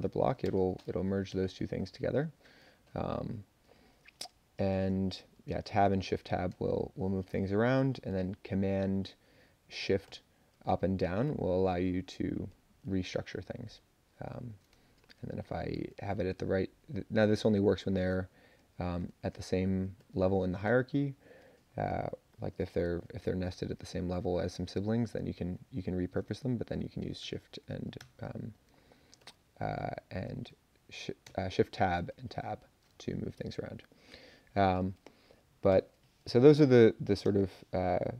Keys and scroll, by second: 0.4 space, 1.3 Return, 4.7 Tab, 5.5 shift+Tab, 5.8 shift+Tab, 6.5 Tab, 10.0 shift+super+Up, 10.7 shift+super+Up, 11.0 shift+super+Page_Up, 11.2 shift+super+Up, 12.5 shift+super+Down, 13.5 shift+super+Up, 14.3 shift+super+Down, 14.8 Tab, 15.4 shift+super+Up, 15.7 shift+super+Up, 16.1 shift+super+Up, 16.3 shift+super+Page_Up, 16.8 shift+super+Down, 17.0 shift+super+Down, 17.1 shift+super+Down, 19.2 shift+Tab, 20.0 shift+super+Up, 20.6 shift+super+Down, 24.9 shift+super+Down, 25.3 shift+super+Down, 25.7 shift+super+Up, 25.9 shift+super+Up, 26.5 Tab, 27.2 shift+Tab, 28.0 shift+Tab, 29.2 shift+super+Up, 29.8 shift+super+Down, 31.2 Tab, 35.7 ctrl+k, 37.2 BackSpace, 37.9 Up.